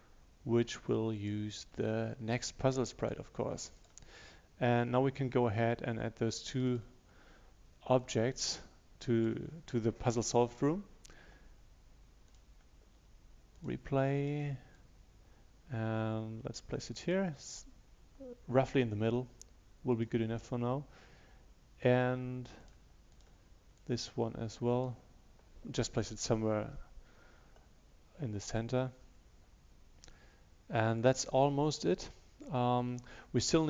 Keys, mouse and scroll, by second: 1.2-9.6 drag, 13.6-25.8 drag.